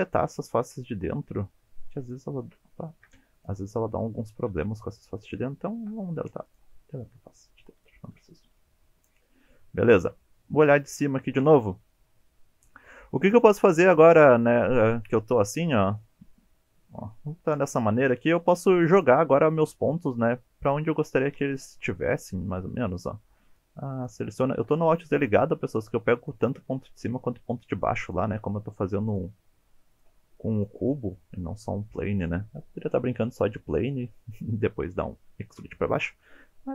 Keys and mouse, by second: 0.6 shift+click, 1.2-1.5 shift+middle drag, 2.0 shift+click, 2.9 ctrl+z, 3.8-4.7 middle drag, 5.8 Delete, 7.0-8.1 middle drag, 8.6-9.1 middle drag, 10.6 KP_7, 13.2 alt+z, 14.6 shift+click, 15.1 1, 16.0 alt+z, 16.3-17.4 middle drag, 18.1 KP_7, 19.2 click, 19.7 g, 21.5 click, 21.9 shift+middle click, 23.5-24.0 drag, 24.8 alt+z, 26.0 drag, 26.9 g, 28.0 click, 28.9 click, 29.3 g, 29.9 drag, 30.4 drag, 30.8 g, 32.1 click, 36.2-36.7 middle drag.